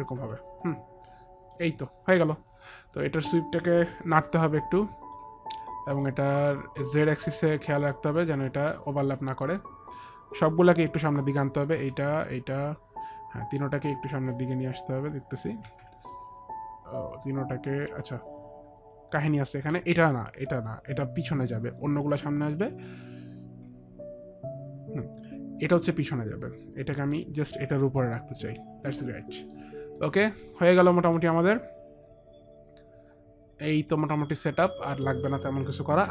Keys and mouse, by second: 0.8 alt+click, 3.1 alt+click, 4.3 e, 5.3 click, 6.0 middle click, 6.0 click, 6.0 e, 6.5 middle click, 8.9 alt+middle click, 11.3 shift+click, 11.3 alt+middle click, 12.3 shift+click, 14.1 shift+click, 15.8 ctrl+z, 18.4 ctrl+z, 21.5 click, 22.9 click, 23.8 click, 25.8 click, 27.4 click, 29.1 middle click, 29.6 middle click, 30.1 alt+click, 31.5 middle click.